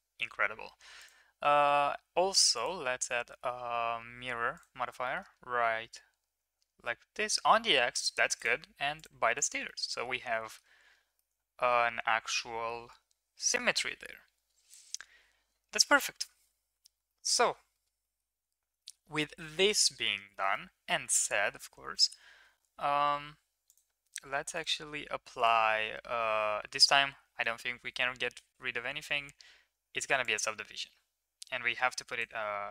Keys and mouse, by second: 0.9 click, 2.3 drag, 2.5-4.6 drag, 5.0 middle click, 9.6-10.5 middle drag, 11.1-12.6 middle drag, 16.6 ctrl+s, 17.0 shift+middle drag, 17.7 shift+middle click, 18.0 middle click, 18.7 middle click, 19.6 middle drag, 20.2 shift+middle click, 20.5-21.4 middle drag, 24.5 click, 24.5 right click, 25.5-27.1 drag, 25.5-27.1 right drag, 28.6 ctrl+1, 30.2-32.2 drag, 31.6-32.2 right drag.